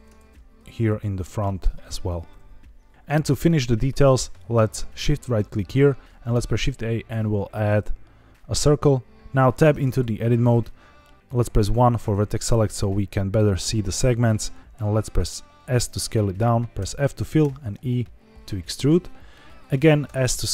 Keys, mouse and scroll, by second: 0.1 shift+z, 0.8 click, 1.0 r, 1.3 t, 1.6 z, 2.9 click, 2.9 ctrl+z, 2.9 shift+right click, 2.9 shift+s, 5.2 shift+right click, 6.3 shift+a, 9.6 Tab, 11.6 1, 13.5 s, 15.8 click, 16.7 f, 17.3 e, 18.7 click, 20.0 s.